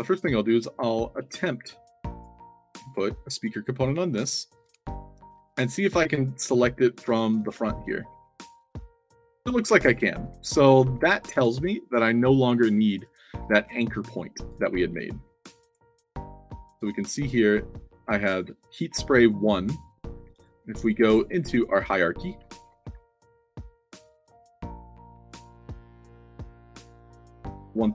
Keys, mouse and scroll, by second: 4.6 Tab, 5.8 d, 6.4 w, 8.0-11.3 typing, 11.4 Tab, 12.9 click, 13.4 f, 13.7-14.4 alt+drag, 14.9 alt+drag, 15.7 alt+drag, 15.9-17.2 typing, 17.4 click, 18.3 space, 19.1 click, 20.3 click, 21.0 click, 21.7 click, 22.2-23.4 typing, 25.4 drag, 25.9 click, 26.2 click, 27.0 a, 27.3 c, 27.7-27.9 alt+drag.